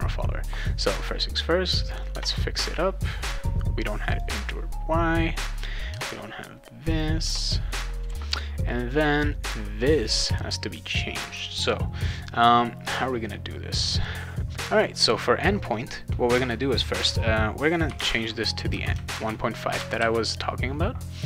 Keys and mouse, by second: 1.2 click, 2.1 BackSpace, 3.4 click, 4.3 BackSpace, 5.9 BackSpace, 6.9 click, 7.2 BackSpace, 8.1 ctrl+s, 8.9 click, 9.1 click, 14.8 click, 14.9 click, 17.6-18.7 typing, 19.1 ctrl+s.